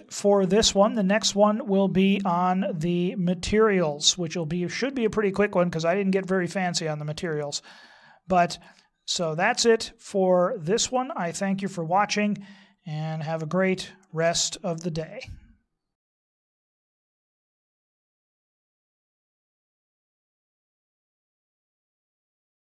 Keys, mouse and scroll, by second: 6.1 middle click, 9.8 middle click, 16.5 scroll up 2, 17.0 shift+middle click, 17.4 middle click, 17.9 shift+middle click, 18.6 middle click, 19.5 shift+middle click, 20.4 scroll up 1, 20.6 shift+middle click.